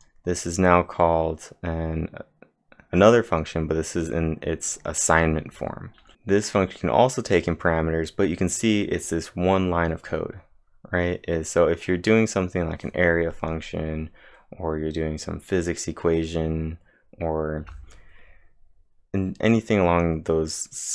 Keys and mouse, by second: 2.0-2.7 typing.